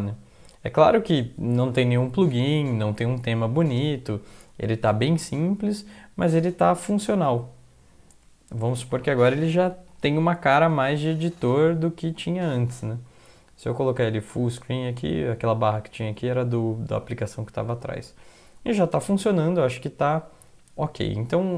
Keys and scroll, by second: 6.8 Down, 7.9 Down.